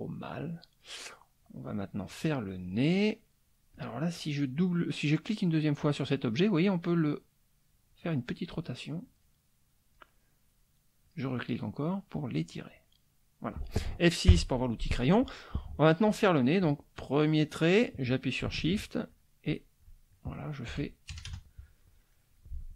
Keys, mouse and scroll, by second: 0.2 click, 1.4-2.4 drag, 2.7 click, 3.7 click, 4.0 middle click, 4.1 click, 6.0 click, 7.6-8.7 drag, 8.7 middle click, 9.0-10.1 drag, 10.1 middle click, 11.0 click, 11.8 click, 12.6 middle click, 12.7 click, 14.2 F6, 16.6 click, 19.1 shift+click, 19.5-20.7 shift+drag, 21.1 shift+KP_Add, 21.6 shift+middle click.